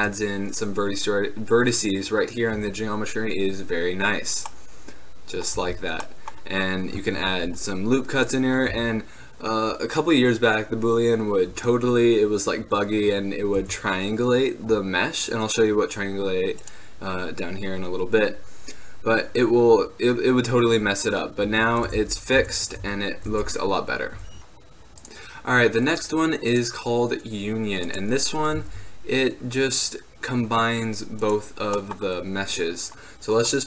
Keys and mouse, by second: 0.1 Tab, 0.3-1.3 drag, 1.3 right click, 2.7 Tab, 4.5 drag, 5.7 Tab, 6.5 click, 6.9 click, 7.4 ctrl+r, 8.5 right click, 8.9 Tab, 9.1 click, 13.7 Tab, 16.7-22.9 drag, 21.6 Tab, 22.1 ctrl+z, 22.5 ctrl+z, 22.9 ctrl+z, 23.4 ctrl+z, 24.3 click, 25.1-29.6 right drag, 28.6 g, 29.8 middle drag, 31.9 drag.